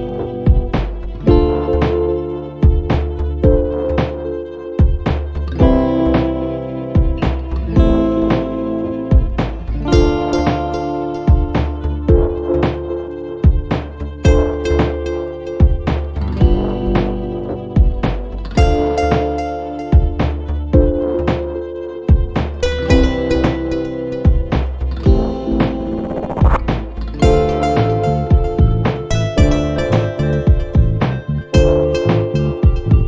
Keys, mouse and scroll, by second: 5.1 a, 5.9 n, 8.3-9.7 typing, 9.8 click, 10.9 click, 13.8 click, 14.5 click, 16.2 m, 18.4 click, 20.6-21.9 typing, 23.3 click, 24.0 click, 27.2-27.8 scroll up 1, 28.0-28.6 scroll down 1, 28.7-29.1 scroll up 1, 29.1-29.5 scroll down 1, 29.5 scroll up 1, 29.8 scroll down 1, 31.1 click, 32.9 click.